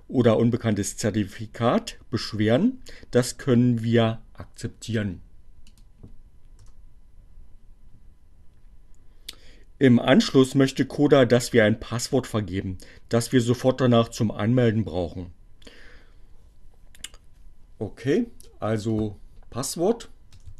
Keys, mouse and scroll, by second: 4.1 click, 6.6 Return, 17.5 click, 18.5-20.5 typing.